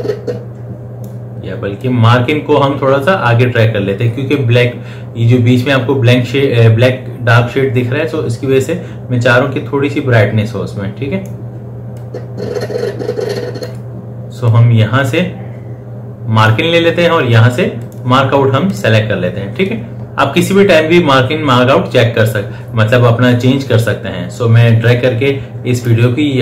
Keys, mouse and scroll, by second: 12.3-18.1 drag, 24.6-26.4 drag.